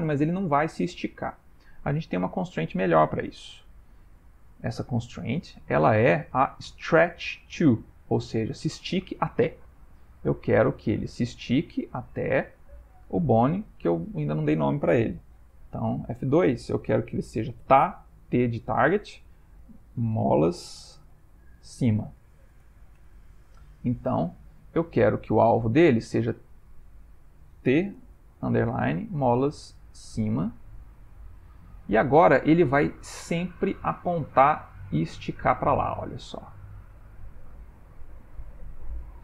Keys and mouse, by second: 3.1 click, 4.6 click, 5.5 click, 11.7 click, 13.7 click, 14.0 click, 15.8 F2, 24.3 click, 25.4 click, 33.7 click, 34.1 g.